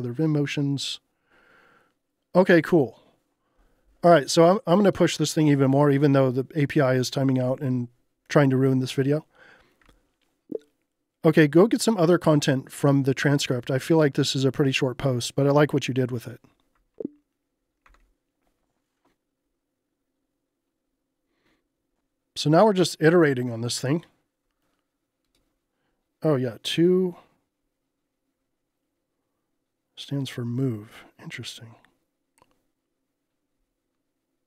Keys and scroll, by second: 17.9 Return, 22.0 Return, 22.7 u.